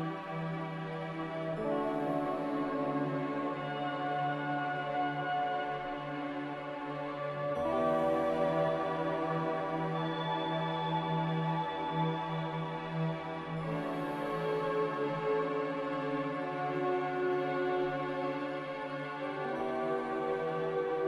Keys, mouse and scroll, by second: 4.3 z, 6.9 b, 8.1 Delete, 11.9 a, 13.2 z.